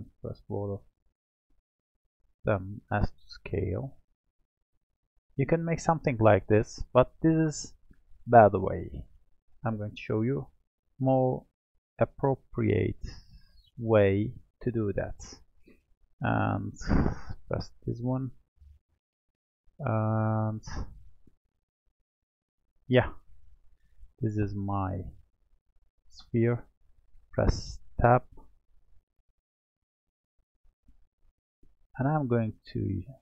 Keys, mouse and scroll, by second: 0.0 click, 0.5 shift+click, 1.1 shift+click, 1.9 shift+click, 3.0 s, 6.0-7.1 scroll up 4, 7.1-8.5 shift+middle drag, 8.5-10.2 scroll up 3, 10.2 click, 12.1 x, 13.5-16.6 middle drag, 16.6 click, 17.0 click, 18.7-19.0 scroll down 1, 19.0-22.1 middle drag, 22.1 click, 23.0-24.1 scroll up 3, 24.1-24.9 shift+middle drag, 24.9-25.6 scroll up 5, 25.6-26.8 shift+middle drag, 26.8 Tab, 27.8 click, 28.8 Tab, 30.5-33.2 drag.